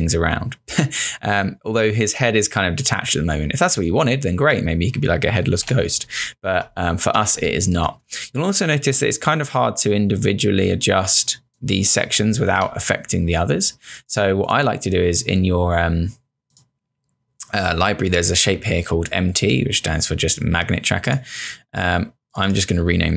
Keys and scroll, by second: 5.5 z, 7.4 space, 12.5 z.